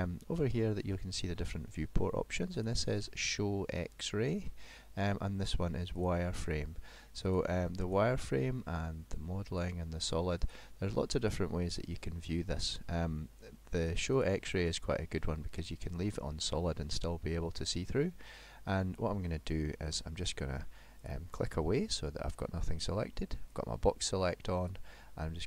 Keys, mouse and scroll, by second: 2.6 click, 6.0 click, 7.2 click, 7.9 click, 9.7 click, 10.4 click, 11.2 click, 13.8 click, 14.2 click, 15.6 click, 16.5 middle click, 21.0 click, 23.5 click, 24.7 click.